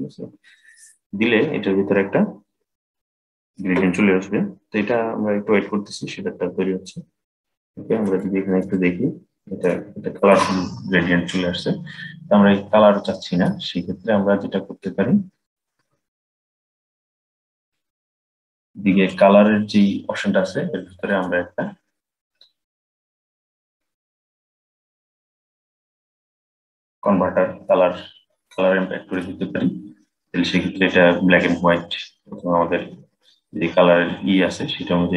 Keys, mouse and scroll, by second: 6.5-7.9 scroll up 3, 7.9 shift+middle click, 8.6-9.4 scroll up 4, 9.4-12.5 shift+middle drag, 12.6-15.7 middle drag, 15.8 click, 17.6-20.6 drag, 20.8-23.9 drag, 33.7-35.1 drag.